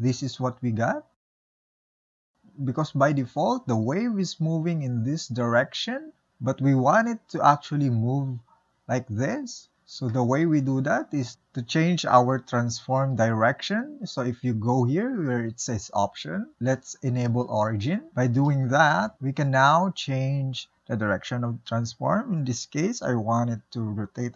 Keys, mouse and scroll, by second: 1.4 space, 3.7 ctrl+z, 3.8-5.6 drag, 6.3 ctrl+z, 6.6-11.3 drag, 11.3-12.9 middle drag, 14.7-17.7 drag, 19.6-20.4 middle drag, 20.4 r.